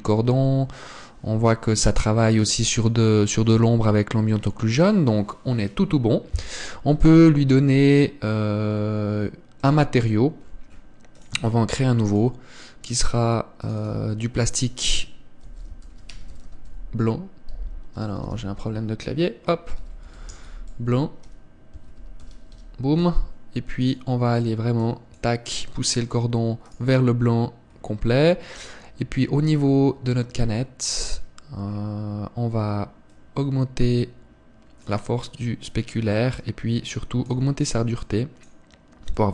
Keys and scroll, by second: 7.3 Escape.